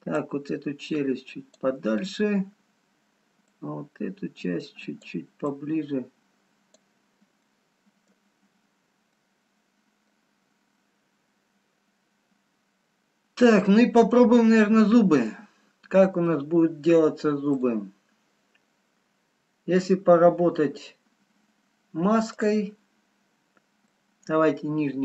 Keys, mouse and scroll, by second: 0.4 click, 2.5 middle click, 2.5 scroll up 5, 3.6 click, 6.5 click, 8.0 middle click, 8.0 scroll down 1, 9.5 middle click, 12.0 scroll down 2, 12.9 middle click, 12.9 scroll down 2, 16.2 middle click, 16.2-17.6 scroll up 2, 17.7 click, 21.1 scroll down 4, 22.3 click, 22.3 scroll down 3, 23.7 scroll up 2.